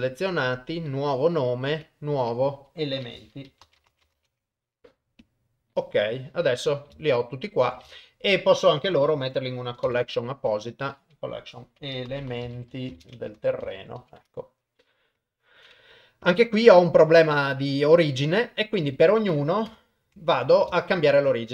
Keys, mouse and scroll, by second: 7.0 shift+middle click, 7.9 ctrl+middle click, 9.8 m, 13.5 r, 16.2 KP_1, 18.0 KP_1, 18.5 middle click, 19.7 KP_1, 20.3 ctrl+middle click, 20.7 shift+middle click, 21.3 click.